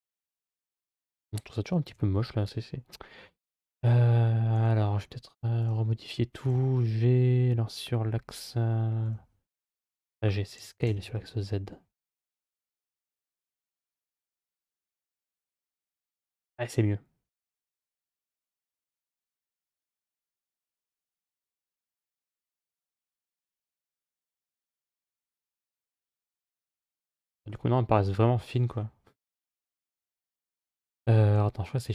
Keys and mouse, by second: 1.7 g, 5.4 click, 6.2 g, 10.4 s, 14.5-17.7 middle drag, 18.0 g, 22.2-24.1 middle drag, 25.4-26.4 middle drag, 27.3-28.3 middle drag, 31.6 shift+a.